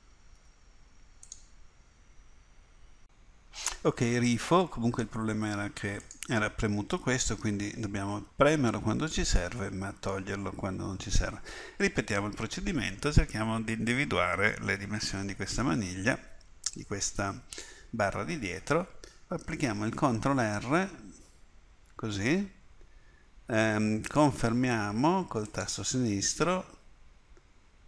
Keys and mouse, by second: 20.2 ctrl+r.